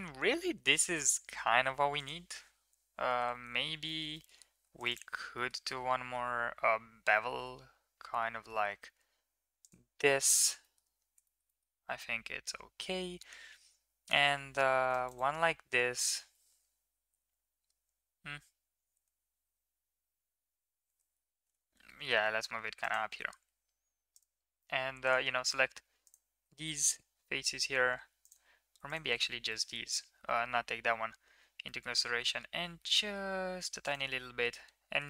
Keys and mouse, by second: 1.8 middle click, 3.0 Tab, 3.7 shift+middle click, 4.0 middle click, 4.4 ctrl+r, 5.9 ctrl+b, 10.2 shift+middle click, 10.5 middle click, 11.1 shift+middle click, 11.3 middle click, 14.3 ctrl+r, 21.3 g, 24.8 3, 25.8 ctrl+click, 26.7 middle click, 28.7 ctrl+click, 29.4 middle click, 31.6 middle click, 31.9 e, 34.3 shift+middle drag, 34.9 shift+middle click.